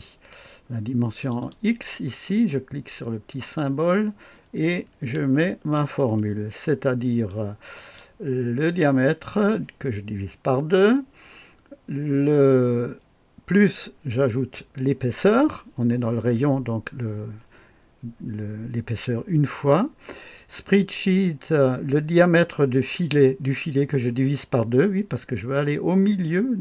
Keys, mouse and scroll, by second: 1.2 click, 3.4 click, 5.5 ctrl+v, 7.3-8.0 drag.